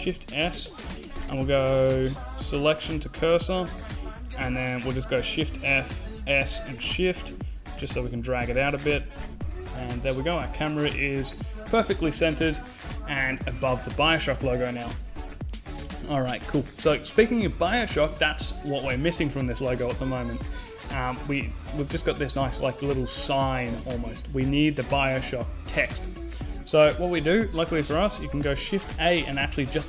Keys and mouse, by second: 4.9 shift+f, 27.6 shift+a.